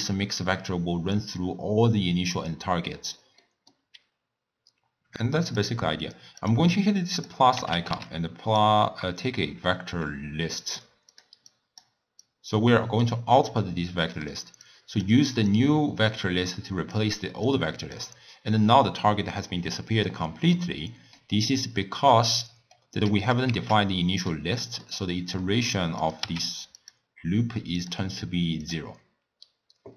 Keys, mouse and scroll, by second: 3.4-5.4 middle drag, 5.4-6.5 drag, 7.1-10.1 drag, 11.5 drag, 12.2-14.0 drag, 14.0-14.7 middle drag, 14.7 click, 15.5-20.5 drag, 20.6-23.1 middle drag, 23.1 click, 23.7 shift+d, 24.6-26.0 middle drag, 26.0 click, 26.2 w.